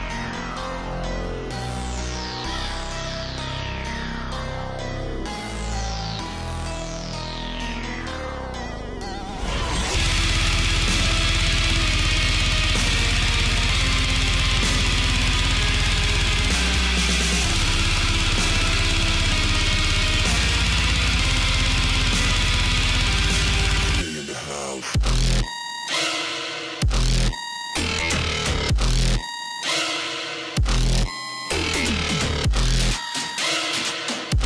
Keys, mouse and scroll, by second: 0.1 space, 2.8 click, 3.1-3.7 scroll down 2, 4.2 alt+scroll up 1, 4.4 alt+scroll down 1, 4.7 click, 5.1-11.0 alt+drag, 11.0-12.3 drag, 12.3 shift+m, 13.6-15.4 alt+drag, 16.2 alt+scroll up 1, 16.9 a, 17.9 click, 19.2-19.8 scroll down 1, 20.5 shift+click, 22.5 ctrl+z, 23.0 click, 24.2 alt+scroll up 1, 24.5 space, 24.6 click, 25.5-26.1 alt+scroll down 1, 26.5 alt+scroll up 1, 26.5 space, 26.7 click, 26.8 space, 28.0 space, 28.2 click, 29.0-29.5 alt+scroll up 1, 29.5-30.6 drag, 30.6 space, 33.9-34.3 alt+scroll down 1, 34.3 click.